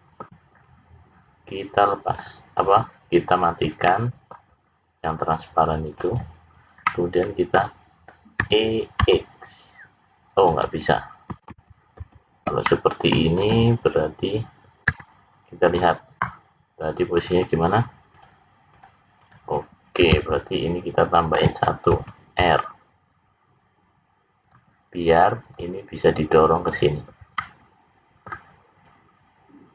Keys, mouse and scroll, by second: 0.5-1.0 scroll up 5, 2.0 click, 3.8 middle click, 5.9 click, 6.1 click, 6.8 middle click, 8.4 e, 11.9 ctrl+z, 12.5 middle click, 13.3 click, 14.8 `, 17.1 click, 18.2 click, 18.7 click, 19.2 click, 19.8-21.3 scroll up 3, 21.9 ctrl+r, 25.4 click, 26.5 click, 26.7 click, 27.3 middle click.